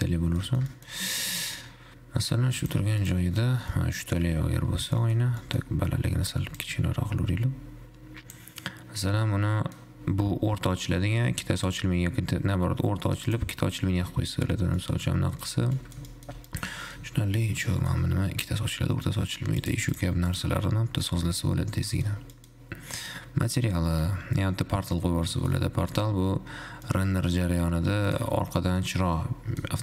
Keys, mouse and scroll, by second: 0.7 middle click, 1.2 scroll down 1, 1.3 middle click, 2.1-2.9 scroll down 1, 2.9 click, 4.1-4.7 middle drag, 4.7-5.2 scroll up 1, 5.2 middle drag, 5.4 scroll down 1, 5.6-7.1 middle drag, 7.1-8.8 drag, 8.8-9.3 scroll up 5, 9.3-12.4 middle drag, 13.7 click, 15.1-15.7 middle drag, 15.7-16.2 scroll down 4, 16.2-16.6 middle drag, 16.6 scroll up 2, 16.7-17.3 middle drag, 17.3-17.7 scroll up 1, 17.7-19.9 middle drag, 19.9 click, 21.2 scroll down 3, 21.2-22.4 middle drag, 22.4 scroll down 1, 22.6-25.7 middle drag, 25.7 scroll up 2, 26.1 z, 27.2-28.3 middle drag, 28.3 click, 28.9 scroll down 1, 29.2-29.8 middle drag.